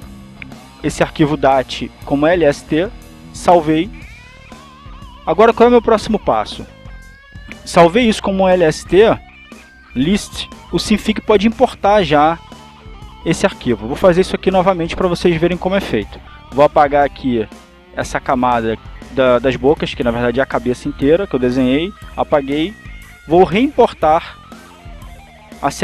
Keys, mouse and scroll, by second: 0.0-1.0 typing, 1.5 click, 2.4-3.6 typing, 4.9 click, 8.6 click, 12.0 click, 14.0 click, 16.1-17.7 drag, 18.8 click, 21.2 Delete, 23.1 click, 25.6 click.